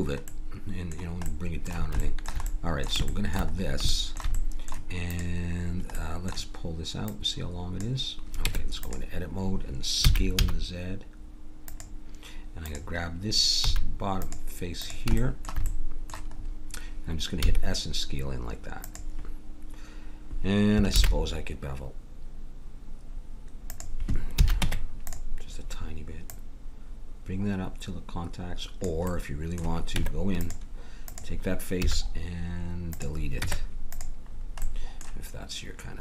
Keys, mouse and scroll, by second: 5.1-8.9 drag, 8.5 Tab, 10.0 s, 11.6 s, 12.6-15.4 drag, 13.7 a, 17.4 s, 20.9 ctrl+b, 24.4 a, 24.6 Tab, 26.2-28.1 drag, 29.1 middle click, 30.0 Tab, 31.8 x, 33.4 Tab.